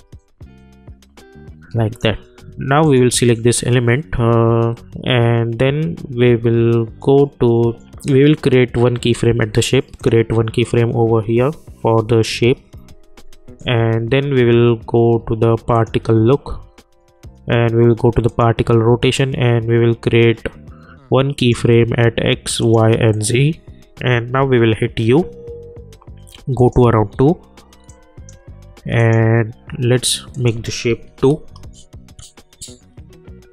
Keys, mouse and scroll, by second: 9.9 click, 15.7 click, 18.2 click, 18.3 click, 21.3 click, 24.4 u, 26.5 click.